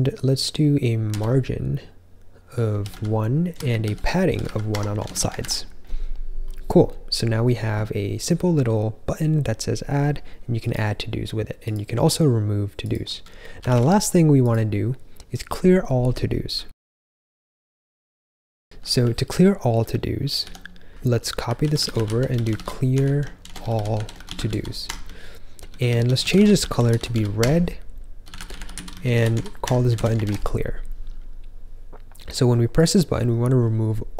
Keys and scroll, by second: 0.0-4.9 typing, 5.0 super+s, 5.3 ctrl+j, 13.3-14.1 typing, 18.4-22.1 typing, 23.1-25.8 typing, 27.8-28.6 typing, 29.9 super+s, 30.2 ctrl+j.